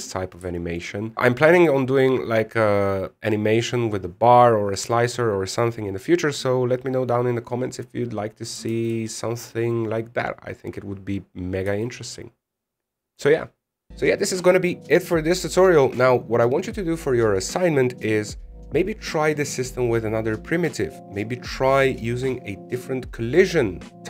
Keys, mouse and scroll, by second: 0.9 scroll down 5, 1.1 shift+middle click, 9.4 alt+a, 12.4 a.